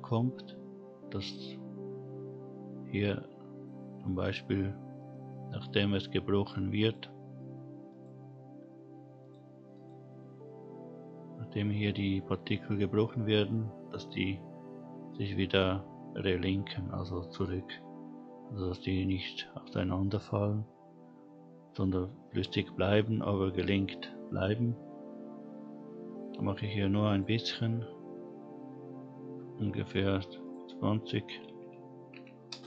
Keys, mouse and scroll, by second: 4.7-5.4 scroll down 1, 5.4-6.8 scroll up 1, 6.8 click, 7.9 click, 9.2 click, 9.7 click, 24.4-27.3 drag, 28.0 scroll down 2, 29.3-30.2 scroll down 2, 30.4-32.5 drag.